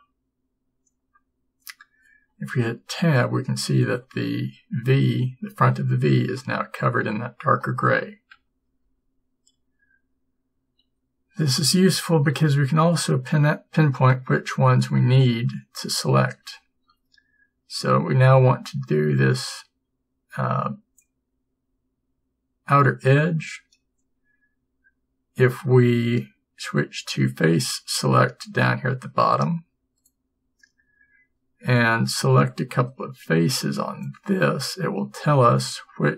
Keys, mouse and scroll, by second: 3.0 Tab, 8.4 Tab, 16.8 a, 34.1 b.